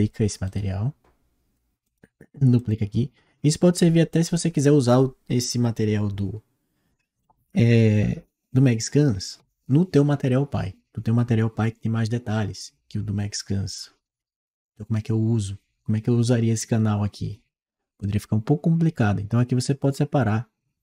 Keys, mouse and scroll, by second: 0.3 right click, 1.7 click.